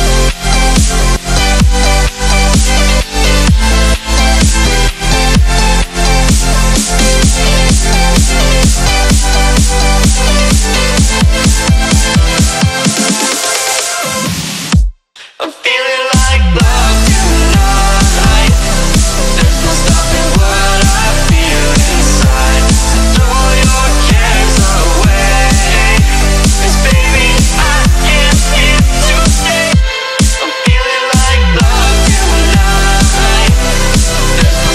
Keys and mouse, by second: 0.0 click, 0.0 space, 0.4 click, 0.5 right click, 2.0 click, 3.0 space, 3.2 click, 3.4 space, 3.8 click, 5.4 click, 7.1-8.7 alt+drag, 8.7-13.7 shift+drag, 14.0 space, 14.1 click, 14.3 space, 14.6 click, 17.1-18.8 alt+drag, 18.8-24.6 shift+drag, 24.6-29.8 shift+drag, 29.8 Down, 30.1 Right, 31.3 Up, 32.1 click, 33.6 right click, 34.1 click, 34.5 ctrl+-.